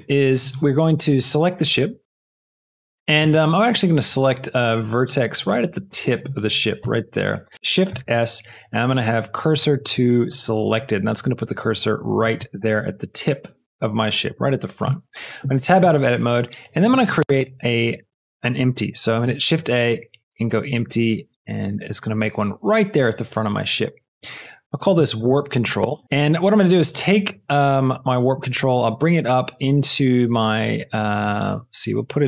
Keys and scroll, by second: 3.1 Tab, 6.7 Tab, 7.9 shift+s, 12.3 Tab, 18.9 shift+a, 24.9 shift+w, 25.2 r, 26.0 Return, 26.0 l, 32.1 f.